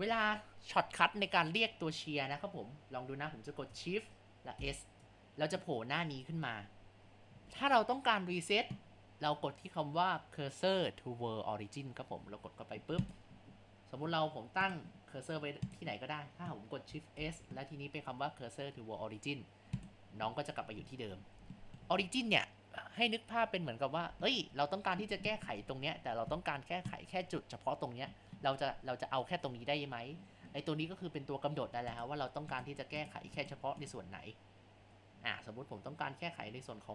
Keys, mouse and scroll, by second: 4.6 shift+s, 14.7-15.8 drag, 17.1 shift+s, 20.9-21.6 scroll down 5, 21.6-24.6 shift+middle drag, 31.9 click, 32.6 click, 33.0 drag, 33.4 click, 33.8 click.